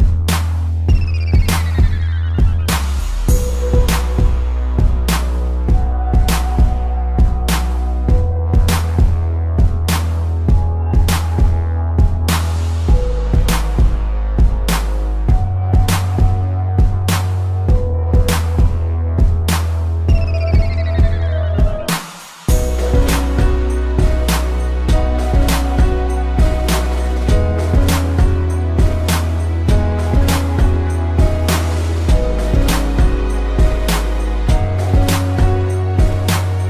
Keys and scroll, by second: 4.7 space, 11.0 space, 17.1 ctrl+-, 17.6 space, 20.3 ctrl+0, 20.7 ctrl+=, 22.0 space, 23.2 ctrl+z, 26.0 ctrl+=, 26.6 space, 31.8 space, 35.5 ctrl+z.